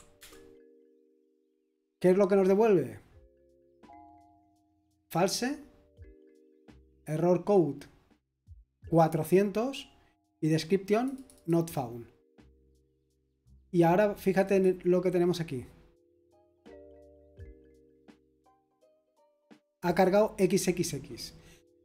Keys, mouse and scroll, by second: 0.2 Return, 14.4 click.